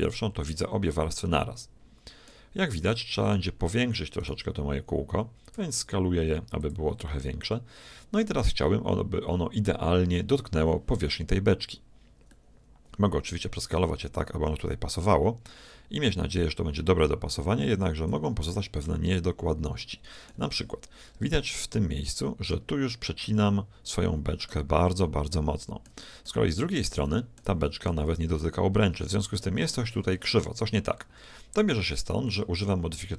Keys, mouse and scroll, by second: 0.0-1.9 drag, 1.1-3.0 middle drag, 3.3-6.1 right drag, 5.5 s, 7.1-9.0 middle drag, 12.4-14.1 middle drag, 13.7 s, 18.5-20.5 middle drag, 21.1 middle click, 21.1-21.6 scroll up 1, 21.6-25.1 middle drag, 25.3-26.9 middle drag, 27.1 middle click, 27.4-29.4 shift+middle drag.